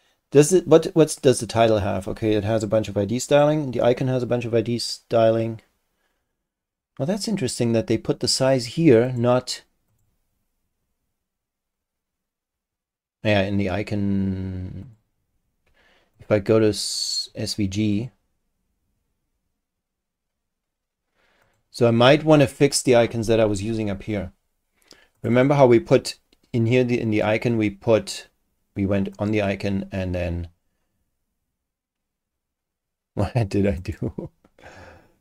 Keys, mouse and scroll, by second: 3.3 click, 9.0 click, 9.9 click, 14.8 click, 16.1 click, 16.9 click, 17.9 click, 21.4 click, 22.7-23.4 scroll up 2, 23.6-24.0 scroll down 1, 25.2 click, 29.1 click, 33.8 click.